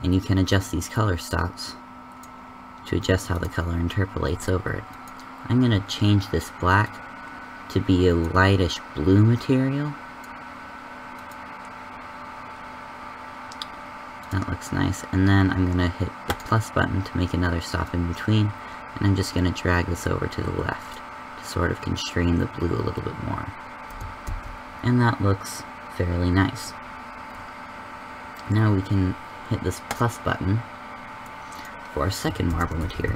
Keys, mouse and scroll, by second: 25.3 shift+z, 29.8-33.1 drag.